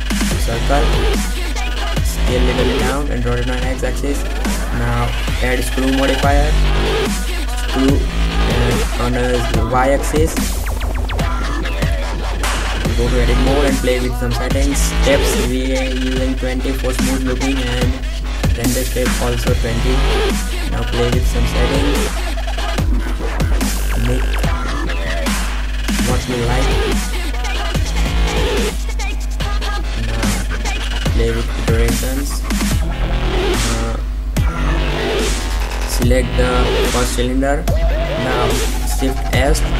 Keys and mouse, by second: 1.7 s, 3.6-4.6 drag, 8.4 click, 9.9 Tab, 10.5 click, 11.7 s, 12.9 middle click, 14.2 middle click, 16.6 middle click, 18.3 middle click, 22.6 s, 23.3-24.4 drag, 25.7 s, 26.4 middle click, 26.6 middle click, 26.8 middle click, 26.9 middle click, 27.3 s, 28.2 s, 29.3 click, 31.2 click, 31.8-32.9 middle drag, 34.6 Tab, 35.9 right click, 38.7 shift+s.